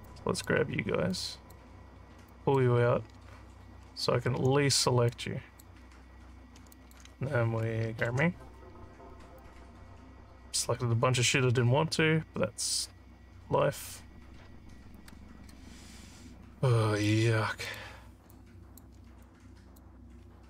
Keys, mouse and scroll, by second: 0.1 click, 1.1 click, 2.3 click, 4.4 w, 5.0 click, 6.8 alt+click, 9.4-17.0 alt+drag, 17.6 click, 18.3 alt+click, 19.2 click.